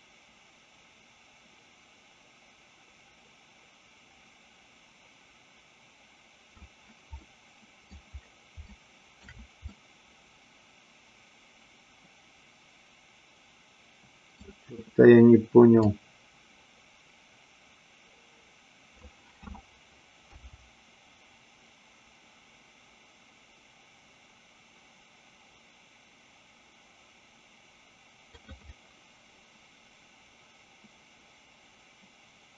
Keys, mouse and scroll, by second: 7.2-7.9 middle drag, 8.6-9.1 shift+middle drag, 9.8-14.4 middle drag, 15.9-19.1 drag, 20.4 g, 28.8-32.5 middle drag.